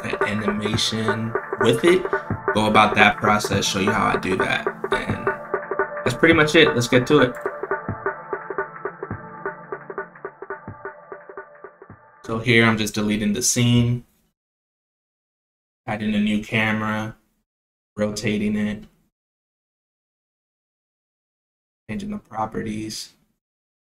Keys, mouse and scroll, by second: 10.7 click, 11.3 right click, 13.5 shift+a, 16.1 click, 16.8 click, 17.4 click, 18.5 click, 19.3 click, 20.8 click.